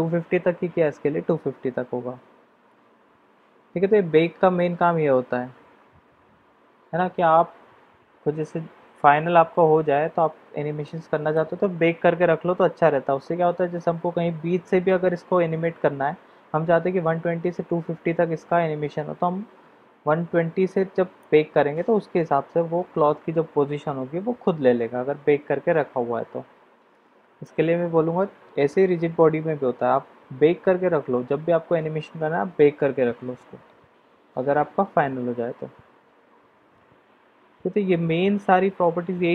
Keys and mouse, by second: 10.8-11.3 middle drag, 21.2-27.5 drag.